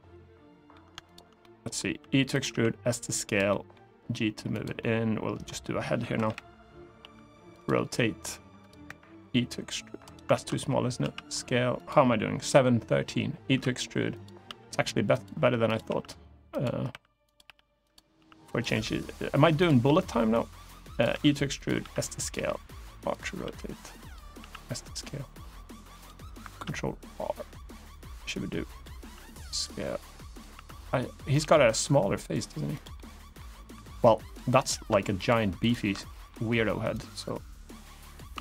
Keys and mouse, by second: 0.8 shift+click, 1.1 middle click, 2.0 click, 2.0 e, 2.2 s, 3.0 click, 3.2 middle click, 3.6 g, 4.2 click, 4.5 middle click, 6.0 KP_3, 6.7 r, 7.2 click, 7.4 g, 8.3 click, 8.6 e, 9.8 right click, 10.1 ctrl+z, 10.7 s, 11.5 click, 13.3 e, 13.9 click, 14.2 r, 14.8 click, 15.0 g, 15.4 click, 15.6 s, 16.2 click, 16.6 r, 17.0 click, 17.2 g, 17.6 click, 17.9 s, 18.2 click, 18.4 r, 19.3 click, 19.6 s, 20.6 click, 20.8 e, 21.3 click, 21.5 s, 21.9 click, 22.1 g, 22.8 click, 23.1 r, 23.8 click, 24.1 s, 24.6 click, 24.6 g, 25.7 click, 26.2 ctrl+r, 28.5 click, 28.7 s, 29.2 click, 29.4 g, 30.0 click, 30.3 s, 31.0 click, 31.1 g, 32.5 click, 32.7 middle click, 33.4 3, 34.0 click, 34.2 middle click, 34.9 ctrl+click, 34.9 ctrl+right click, 35.3 click, 35.7 middle click, 36.6-37.9 drag, 38.2 2.